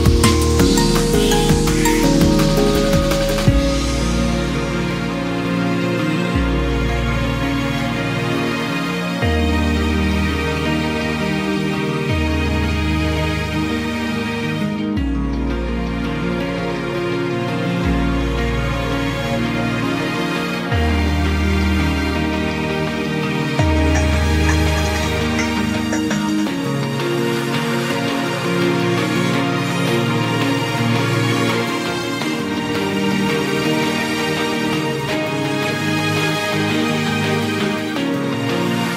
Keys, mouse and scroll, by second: 1.1-6.7 drag, 8.7 ctrl+z, 10.7-15.7 drag, 15.7-16.7 scroll down 3, 16.7 click, 18.8-19.5 scroll up 2, 19.5 s, 20.4 s, 21.8-22.6 scroll up 2, 22.6 click, 23.9-24.8 scroll up 1, 24.8 r, 26.6-27.0 scroll up 2, 27.0 s, 27.9 shift+middle click, 28.3-28.9 scroll up 1, 28.9 g, 31.8 s, 33.1-34.0 scroll up 2, 34.0 s, 35.6 click, 37.2-37.8 scroll down 1, 37.8 KP_3.